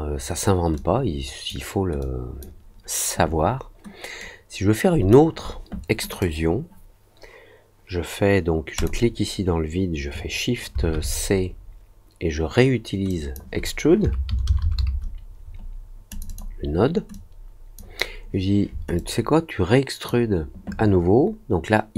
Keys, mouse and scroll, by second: 0.7 click, 1.9 click, 4.1 click, 6.0 click, 8.7 click, 13.0 click, 16.0 click, 16.2 click, 17.1 click, 18.9-20.0 drag.